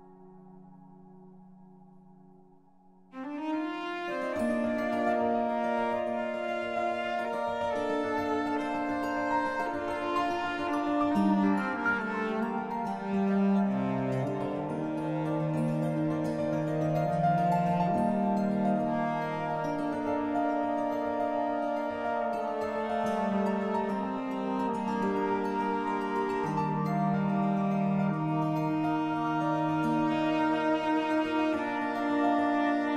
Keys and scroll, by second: 23.8 b, 27.6 z.